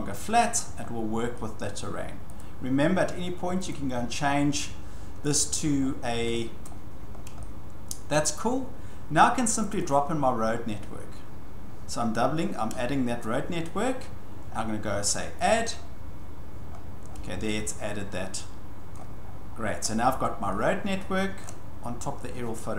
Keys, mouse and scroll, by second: 0.8 shift+scroll, 1.6 scroll, 2.4 click, 3.7 click, 5.3 click, 5.8 scroll, 6.6 scroll, 7.2 scroll, 7.9 scroll down 6, 8.1 scroll down 1, 9.7 click, 9.9 click, 10.5 scroll, 13.1 scroll down 1, 15.5 click, 16.7-17.4 scroll, 18.9 shift+scroll, 19.7-20.4 scroll, 21.4 shift+scroll.